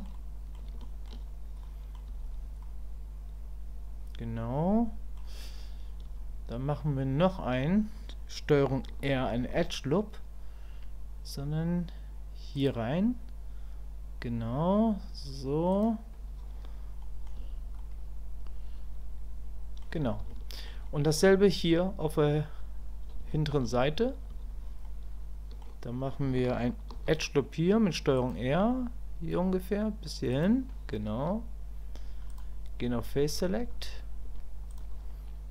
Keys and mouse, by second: 0.2 click, 0.8 shift+click, 1.6 click, 2.6-5.2 drag, 17.0 middle click, 17.8-19.8 middle drag, 20.3 shift+middle click, 20.9 middle click, 23.3 shift+middle click, 24.8 click, 32.3-35.5 drag.